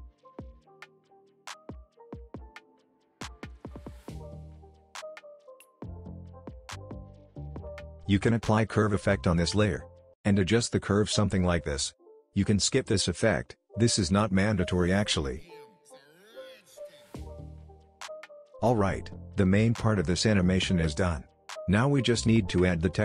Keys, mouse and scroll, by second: 4.6 ctrl+d, 5.6 ctrl+z, 6.3 click, 7.8 ctrl+space, 8.2 typing, 9.1 Return, 10.5-12.7 drag, 17.9 space, 19.9-21.5 drag.